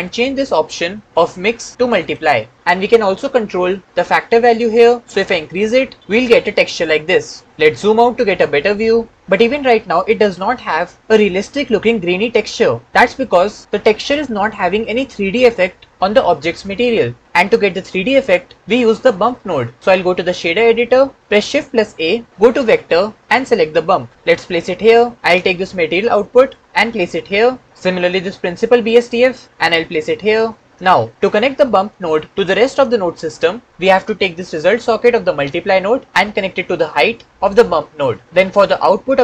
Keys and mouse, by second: 0.3 middle click, 1.0 click, 5.0 click, 21.2 shift+middle click, 22.2 shift+a, 26.4-27.6 drag, 29.4 click, 30.6-32.3 right drag, 36.0-37.3 right drag.